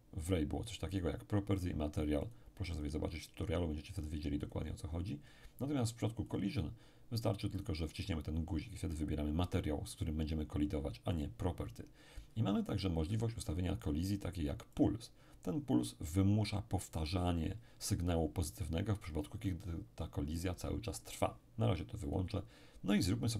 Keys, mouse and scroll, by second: 0.7-3.8 drag, 4.4 click, 6.3 click, 7.6 click, 11.2 click, 14.8 click, 22.1 click.